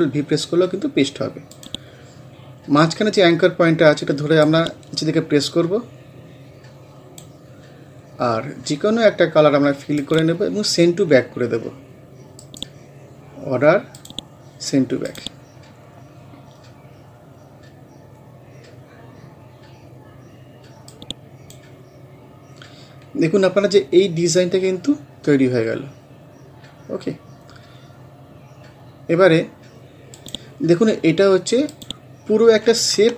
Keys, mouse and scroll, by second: 1.5 click, 2.6 scroll up 1, 4.5-9.5 drag, 10.0 click, 12.4 right click, 14.0 click, 15.8 scroll down 1, 17.1 scroll up 1, 19.5 scroll up 1, 20.9 click, 21.8 scroll down 1, 23.1 scroll up 1, 27.4 scroll down 1, 28.5 scroll up 1, 30.2-33.1 drag.